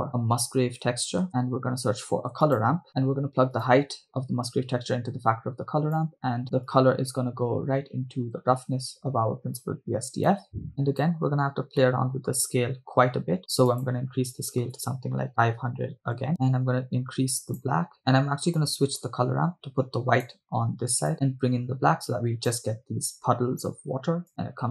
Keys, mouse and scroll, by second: 2.1 shift+a, 4.5-6.1 drag, 6.7 click, 7.2-10.5 drag, 10.7 click, 11.4 scroll up 2, 11.8 middle click, 13.8-16.3 drag, 15.9 0, 16.4-17.9 drag, 18.7-20.5 drag, 21.1-22.8 drag, 24.3-24.7 drag.